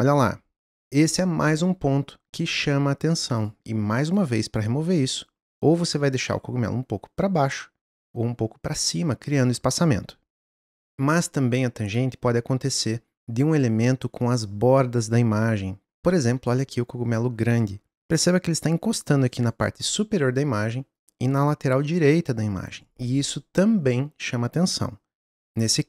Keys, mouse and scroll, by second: 0.9-4.1 drag, 6.3 click, 10.7 click, 18.0-25.4 drag.